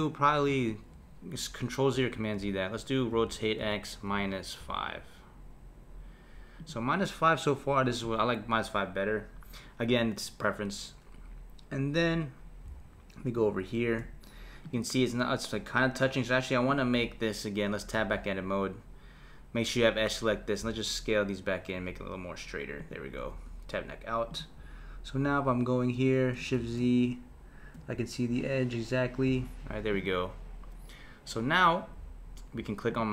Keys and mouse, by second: 0.0 click, 0.7 z, 1.9 z, 3.1 r, 14.6 click, 16.7 click, 17.9 Tab, 20.6 s, 23.3 Tab, 24.3 click, 25.2 KP_1, 26.6 shift+z, 29.3 shift+z, 29.9 click, 32.9 click.